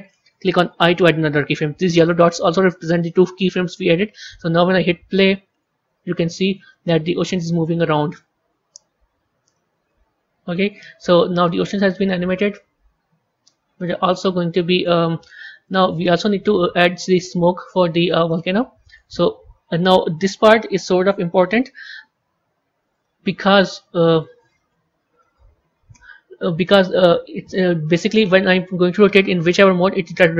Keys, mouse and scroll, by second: 0.6 i, 5.0 click, 10.6-14.5 drag, 15.5-18.2 drag, 18.2-21.3 middle drag, 22.8 click, 23.9 click, 24.0-27.0 drag, 27.5 a.